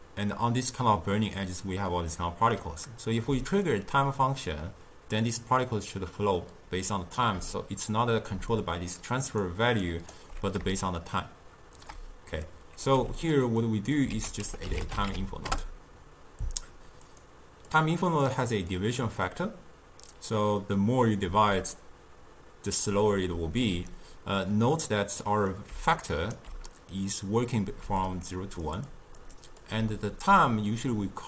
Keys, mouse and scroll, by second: 2.2-3.8 middle drag, 3.8-6.8 shift+drag, 8.4 d, 8.6 click, 9.5-9.8 d, 9.9 right click, 10.2 d, 10.4 d, 10.9-13.0 shift+drag, 13.0 g, 13.7 click, 14.2 ctrl+a, 17.8 click, 18.8 click, 25.3-25.8 middle drag, 25.8-29.8 typing, 26.1 right click, 28.2 click, 29.0 click, 29.5 click, 31.0 d.